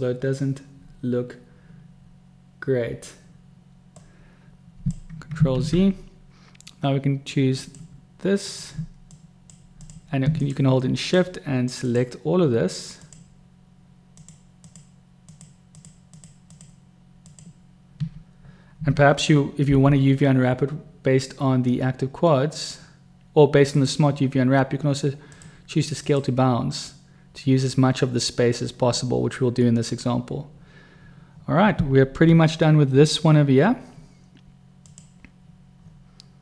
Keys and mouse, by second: 3.9-4.9 drag, 4.9 right click, 5.5 ctrl+z, 7.6 click, 8.4 click, 9.2-9.5 drag, 9.7 click, 10.3 shift+click, 11.0 shift+click, 11.8 shift+click, 12.9 shift+click, 14.2 shift+click, 14.6 shift+click, 15.2 shift+click, 15.7 shift+click, 16.1 shift+drag, 16.5 shift+click, 17.3 shift+click, 19.7 u, 32.4 Tab, 34.7 click.